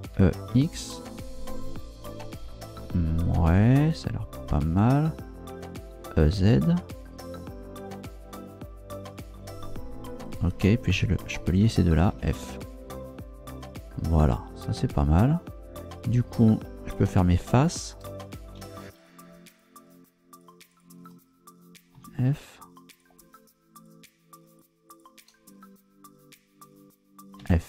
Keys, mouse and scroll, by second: 0.1 e, 0.5 x, 4.5 click, 5.9 e, 6.4 z, 10.1 click, 10.9 shift+right click, 12.1 f, 16.4 shift+right click, 16.9 shift+right click, 17.3 shift+right click, 17.8 shift+right click, 18.6 f, 19.0 shift+right click, 19.5 shift+right click, 20.3 shift+right click, 20.7 shift+right click, 21.9 f, 22.9 shift+right click, 23.7 shift+right click, 24.5 shift+right click, 24.9 shift+right click, 27.4 f.